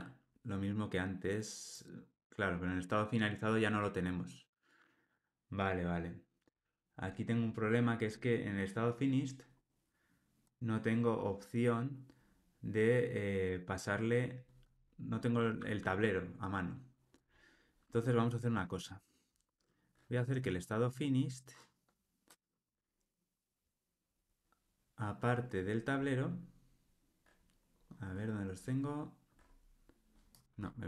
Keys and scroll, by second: 17.1 super+b.